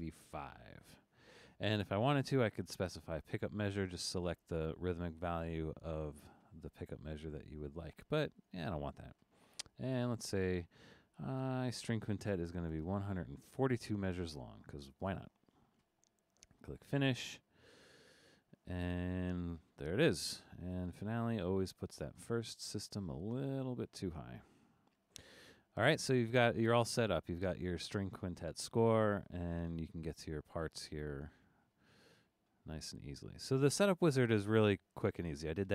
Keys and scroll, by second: 0.0 5, 11.1 1, 11.4 4, 12.6 2.